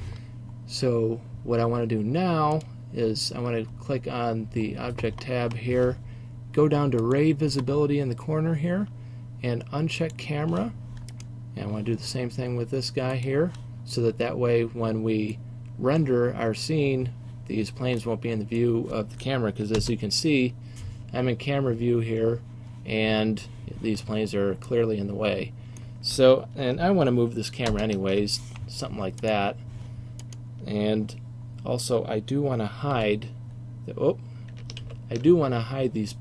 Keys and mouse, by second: 11.2-13.2 right drag, 13.6-14.0 drag, 14.0-18.1 middle drag, 19.9 KP_0, 27.7 ctrl+alt+KP_0, 31.3 click, 33.0 h, 34.9 ctrl+z.